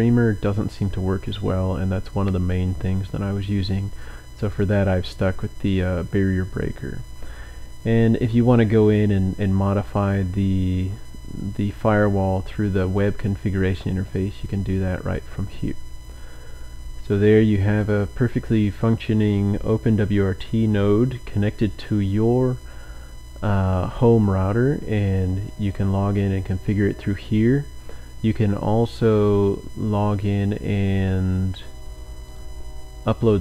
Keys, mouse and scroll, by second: 4.5 click, 6.3-7.3 scroll down 2, 10.1-11.3 scroll up 1, 12.6-13.5 scroll down 2, 14.0-15.1 scroll up 1, 17.7 click, 32.3 click, 32.7-33.3 scroll up 1.